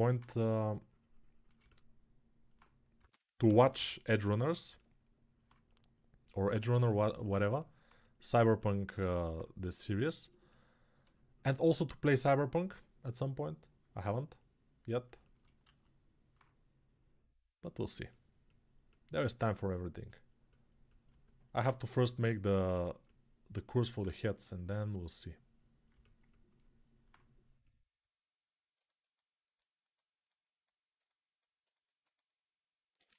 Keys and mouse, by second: 2.7 g, 3.2 ], 3.4 ], 3.5 ], 28.8-33.1 alt+right drag.